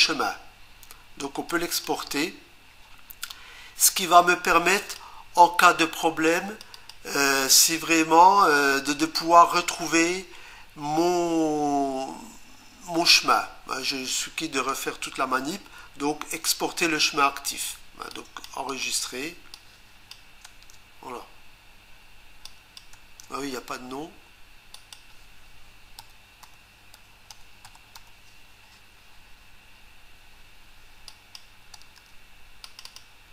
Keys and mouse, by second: 1.5 click, 4.0 click, 6.3 click, 6.7 click, 18.1 click, 18.7 click, 19.5 click, 20.4 Return, 22.4 click, 22.9 Return, 24.7 click, 25.8-28.4 typing, 31.1 click, 32.6 click, 32.8 click, 32.9 double click.